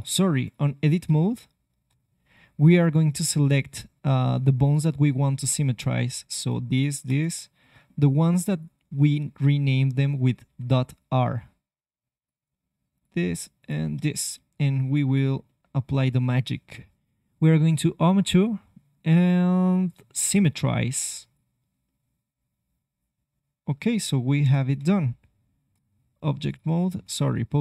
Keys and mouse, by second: 0.5 click, 1.0 ctrl+Tab, 3.3 c, 4.3-5.3 drag, 6.5-9.3 drag, 7.1 c, 8.2 c, 9.7-11.5 drag, 10.4 c, 12.9-14.2 drag, 14.2 middle click, 14.9-16.1 middle drag, 22.0-23.8 middle drag, 24.4 KP_3, 24.8 ctrl+Tab, 26.4-27.6 drag.